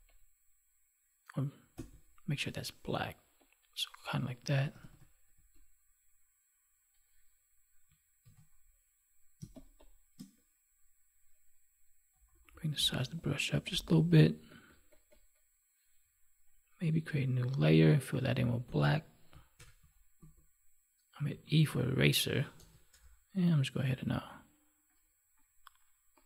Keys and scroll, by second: 8.2 ctrl+d, 9.4 space, 19.5 alt+BackSpace.